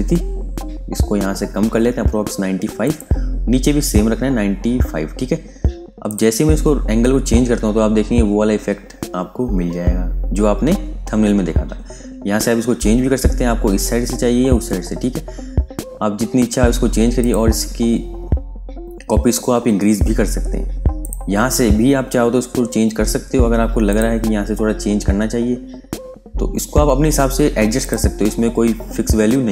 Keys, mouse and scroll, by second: 2.7 click, 3.2 scroll down 1, 4.3-5.9 scroll up 1, 5.9 click, 6.7-8.4 scroll up 1, 10.8-13.5 scroll down 1, 14.8-17.1 scroll up 1, 17.1 click, 17.4-19.1 scroll up 1, 19.1-19.7 scroll down 1, 19.7-20.9 scroll up 1, 20.9 click, 21.3-22.0 scroll down 1, 22.0-23.8 scroll up 1, 23.8 click, 24.1-25.0 scroll up 1, 25.0 scroll down 1, 27.7 click, 28.1 scroll down 1.